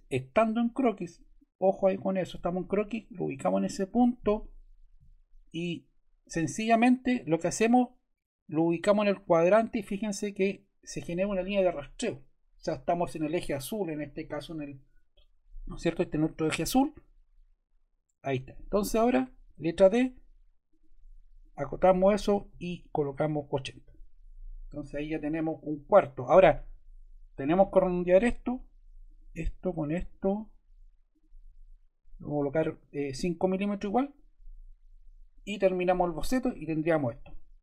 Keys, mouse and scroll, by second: 18.1 click, 19.5 typing, 20.6 click, 21.3 click, 22.0-22.9 typing, 23.2 Return, 27.3 click, 29.0 click, 29.9 click, 32.6 5, 32.9 Return, 35.6 click.